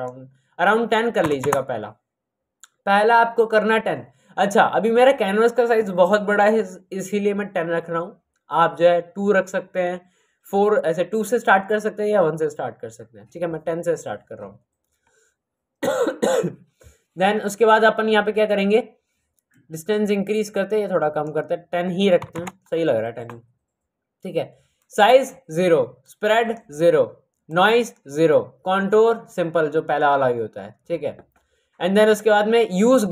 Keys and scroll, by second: 1.2 KP_1, 22.2 KP_1.